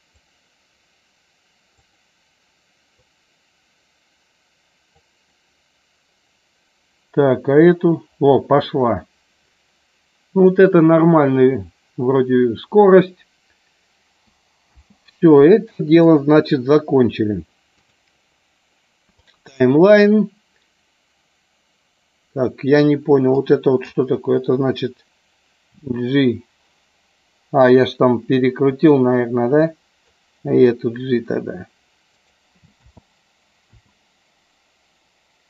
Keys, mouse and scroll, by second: 1.8 click, 2.9-5.0 drag, 14.7 space, 16.0 click, 16.5 click, 17.7-19.3 drag, 23.4 click, 29.6 click, 32.6 space.